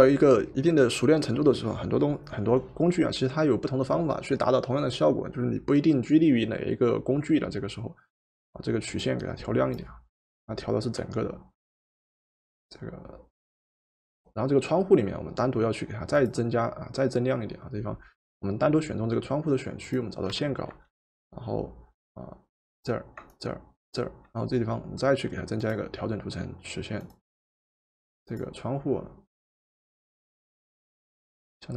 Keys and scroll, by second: 20.4 w.